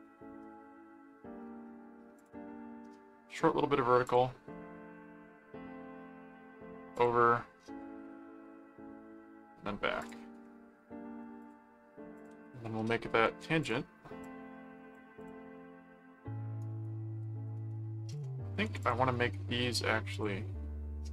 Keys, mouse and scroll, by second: 2.1 click, 4.0 click, 6.9 click, 10.0 click, 11.4 ctrl+click, 12.1 ctrl+click, 13.3 alt+a, 13.6 alt+click, 14.5 click, 15.2 click, 16.6 right click, 18.1 click, 18.8 click, 19.1 right click, 20.1 click.